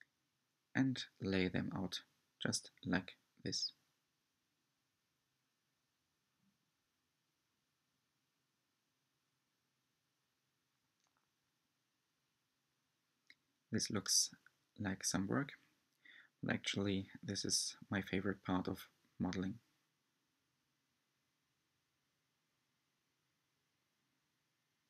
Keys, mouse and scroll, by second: 0.0-3.9 typing, 0.5 middle click, 0.7 click, 1.4 click, 1.8 scroll down 4, 2.0 click, 2.4 shift+middle click, 2.5 click, 2.9 shift+middle click, 3.2 click, 3.5 Tab, 3.6 middle click, 3.6 scroll up 6, 3.7 Tab, 3.8 scroll down 4, 3.9 scroll up 4, 4.0 shift+click, 4.3 middle click, 4.7 middle click, 4.8 shift+click, 4.8 shift+click, 4.9 shift+middle click, 5.1 scroll up 3, 5.2 shift+click, 5.4 shift+click, 5.4-5.7 scroll down 16, 5.4 middle click, 5.8-7.3 typing, 7.2 click, 7.7 middle click, 7.8 Tab, 7.8 middle click, 7.9 scroll up 1, 8.0 scroll down 1, 8.1 middle click, 8.2-8.7 scroll up 5, 8.3 middle click, 8.4 Tab, 8.4 3, 8.5 click, 8.7 shift+click, 8.8 shift+click, 9.0 scroll down 9, 9.1 middle click, 9.2-9.5 scroll up 3, 9.2 middle click, 9.3 click, 9.4 middle click, 9.6 shift+click, 9.8 shift+middle click, 9.9 shift+click, 10.0 shift+click, 10.1 shift+middle click, 10.1 shift+click, 10.5 shift+middle click, 10.5 scroll down 4, 10.5 shift+middle click, 10.8 g, 10.9 r, 11.1 shift+middle click, 11.2 scroll up 3, 11.3 middle click, 11.6 s, 11.7 shift+middle click, 11.9 scroll down 1, 11.9 middle click, 12.0 shift+middle click, 12.2 scroll up 1, 12.3 shift+click, 12.7 shift+middle click, 12.9 shift+click, 13.3 scroll down 4, 13.4-15.5 typing, 13.8 middle click, 13.9 scroll down 1, 13.9-14.4 scroll up 2, 14.0 shift+click, 14.1 middle click, 15.7 shift+middle click, 15.9 click, 15.9 middle click, 16.0 scroll down 2, 16.0 shift+middle click, 16.1 scroll up 2, 16.2 shift+middle click, 16.2 middle click, 16.5 shift+click, 16.6-18.2 typing, 17.4 Tab, 17.5 Tab, 17.5 shift+click, 17.7 scroll down 1, 18.3 middle click, 18.4-18.7 scroll up 7, 18.7 middle click, 18.8 shift+click, 19.1 shift+click, 19.2 shift+drag, 19.3 middle click, 19.4 shift+click, 19.4 shift+click, 19.5 shift+click, 19.6 shift+click, 19.8 shift+middle click, 20.0 shift+click, 20.3-20.6 shift+drag, 20.4 middle click, 20.6 middle click, 20.7 scroll down 2, 20.7 shift+middle click, 20.9 shift+middle click, 21.2 shift+click, 21.5 shift+click, 21.7 shift+middle click, 21.8 shift+click, 21.9 shift+middle click, 22.0 shift+click, 22.6-23.9 typing, 22.8 click, 24.2 Tab, 24.3 middle click, 24.3 scroll down 1, 24.4 middle click, 24.7 scroll up 2, 24.7 shift+middle click.